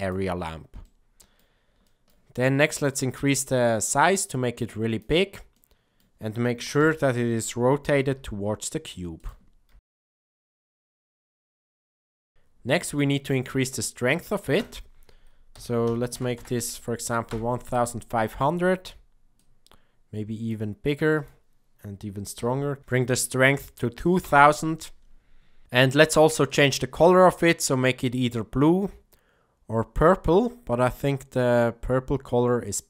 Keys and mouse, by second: 0.8-1.3 middle drag, 1.8 shift+middle click, 2.9-5.0 drag, 5.5-6.0 middle drag, 6.7 KP_7, 8.0 r, 9.7 g, 10.2-10.5 middle drag, 10.7 r, 11.2 g, 11.9 KP_0, 12.6 shift+middle click, 14.6-18.2 drag, 16.3 KP_0, 19.3-20.5 drag, 21.1-25.0 drag, 22.8 KP_0, 26.4 click.